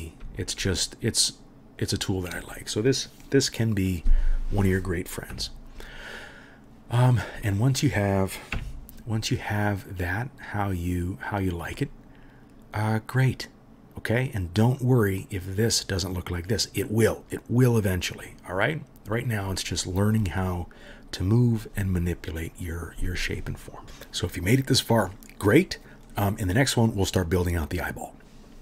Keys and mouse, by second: 0.5-1.9 alt+right drag, 1.9-4.6 middle drag, 5.3 KP_3, 8.5 KP_Decimal, 8.7 middle click, 10.1 middle click, 10.3 middle click, 10.5 middle drag, 10.8-28.6 middle drag.